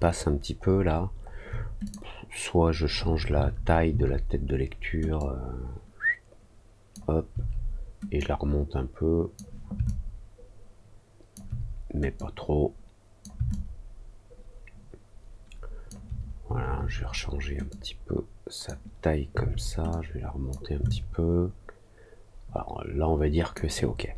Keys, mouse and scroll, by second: 0.1 alt+middle click, 0.5 alt+middle click, 0.5-1.1 alt+scroll down 2, 0.9 alt+middle click, 1.2 alt+middle click, 1.8 click, 5.1-6.9 drag, 8.1-9.3 drag, 9.8-11.3 alt+drag, 12.1-13.2 drag, 13.4-15.8 alt+drag, 17.6 click, 19.8 click, 20.8-23.5 alt+drag, 23.8-24.1 alt+scroll down 2.